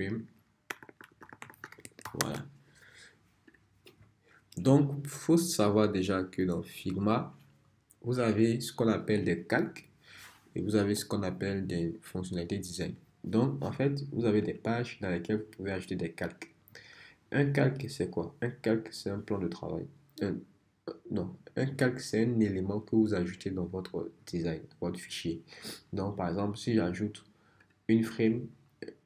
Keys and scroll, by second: 0.0-2.6 typing.